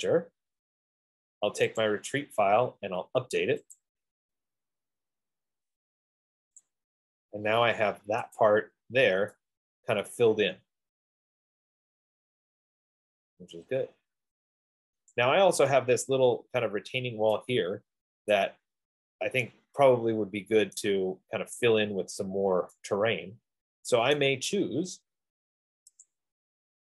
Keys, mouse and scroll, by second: 0.5 click, 2.1 click, 4.1 click, 6.8 click, 8.6 click, 15.3 right click, 16.2 middle click, 16.4 middle click, 18.8 right click, 21.0 right click, 22.4 F15, 24.5 right click, 26.4 click.